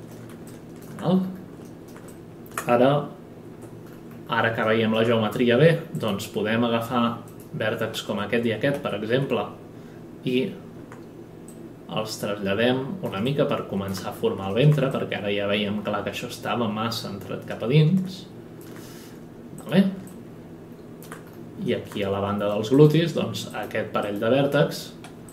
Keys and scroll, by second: 3.5 F9, 8.7 w.